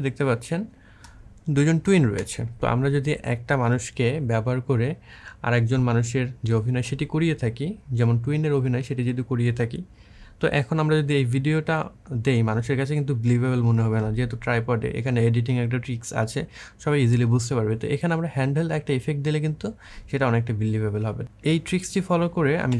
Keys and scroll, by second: 2.0 space, 22.4 Delete.